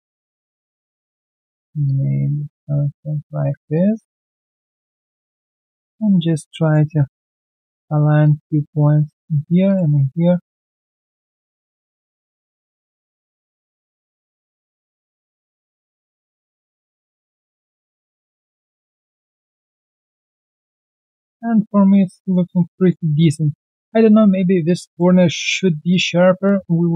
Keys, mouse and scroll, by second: 17.6 right click, 18.0-18.5 scroll down 1, 18.6 alt+middle click, 18.9 alt+scroll down 1, 19.2 alt+click, 19.5 alt+middle click, 19.9 alt+click, 21.0 alt+middle click, 22.2 alt+click, 22.4 alt+right click, 22.7 alt+click, 23.8 alt+middle click, 24.1 alt+right click, 24.8 alt+click, 25.5 alt+middle click, 25.9 alt+click, 26.6 alt+middle click, 26.8-26.9 alt+scroll down 1.